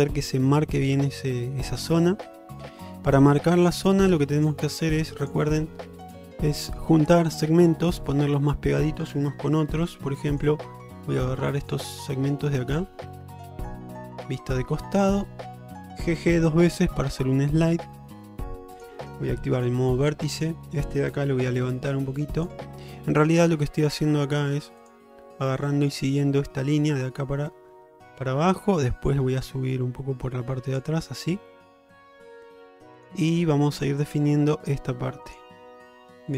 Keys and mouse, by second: 7.7 middle click, 10.0 2, 10.4 click, 11.1 middle click, 11.7 click, 12.1-14.3 alt+middle drag, 14.8 shift+middle click, 16.7 g, 19.6 1, 20.4 click, 21.5 g.